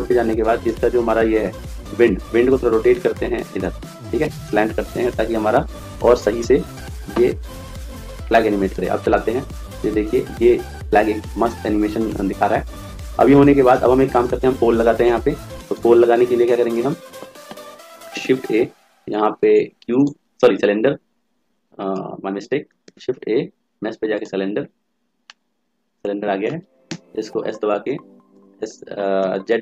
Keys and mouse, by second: 0.4 click, 1.5-2.8 right drag, 2.7 r, 8.5 click, 15.7 click, 16.5-17.9 right drag, 18.0 shift+a, 21.8 ctrl+z, 22.7 shift+a, 25.1-26.7 drag, 26.7 s.